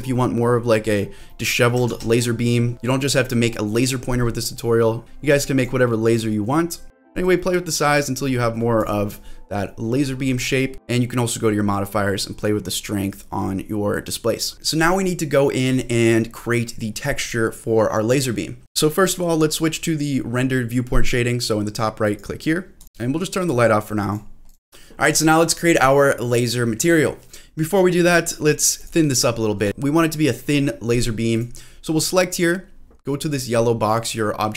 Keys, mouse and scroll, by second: 1.0 scroll down 1, 1.3 middle click, 1.8 ctrl+z, 2.2-2.7 scroll up 2, 2.7 scroll down 1, 4.4 middle click, 4.8-5.6 scroll up 2, 5.6-6.8 drag, 7.0 click, 7.3 middle click, 7.8 scroll up 1, 7.9-8.3 scroll down 1, 8.3 middle click, 8.8 click, 12.4-14.5 drag, 16.1 middle click, 18.6 click, 18.8 click, 22.2-23.9 drag, 23.4 shift+middle click, 23.4-23.9 scroll down 1, 24.1 click, 28.8 click, 29.4 shift+middle click, 31.3 click, 31.9 click.